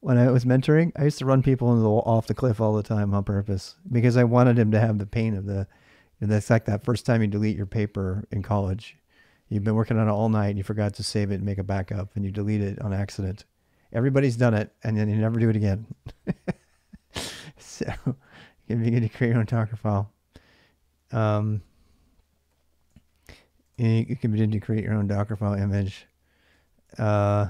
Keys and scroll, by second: 15.6-16.5 typing, 17.8-18.5 typing, 20.5-25.3 typing, 26.4-27.4 typing, 26.7 ctrl+[, 26.7 ctrl+h.